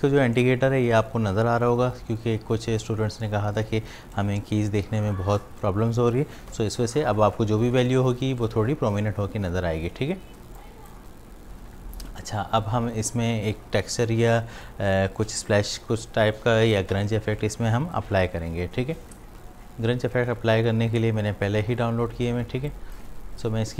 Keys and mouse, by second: 0.0 v, 5.1 v, 10.4 space, 10.6 click, 11.0 space, 22.5 space, 22.7 click, 23.0 space.